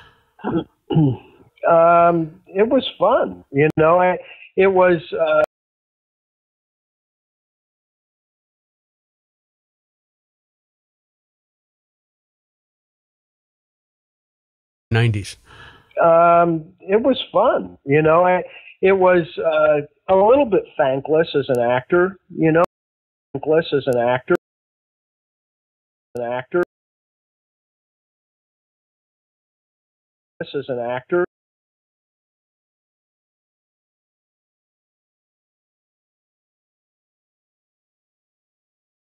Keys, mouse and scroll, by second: 0.6-2.9 drag, 3.6 Delete, 4.8 click, 5.4 space, 6.1-7.3 drag, 8.7 click, 9.6 click, 10.2 click, 11.4 click, 12.3-13.7 drag, 14.7 click, 14.8 space, 17.3 ctrl+s, 20.2-21.5 drag, 21.8 click, 22.6 space, 23.1 click, 23.3 space, 24.3 space, 24.6 click, 25.1 click, 25.3 click, 26.1 space, 26.5 space, 26.9 click, 27.8-29.5 shift+drag, 30.2 click, 31.2 space, 31.6 click, 31.7 click, 33.1 ctrl+s, 33.7 space.